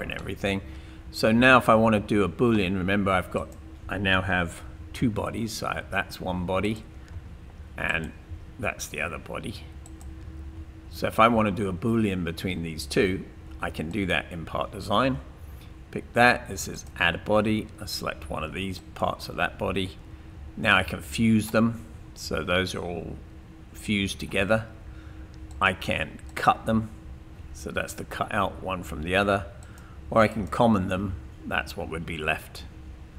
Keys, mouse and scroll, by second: 5.0 space, 7.1 space, 8.3 space, 11.7 space, 13.9 click.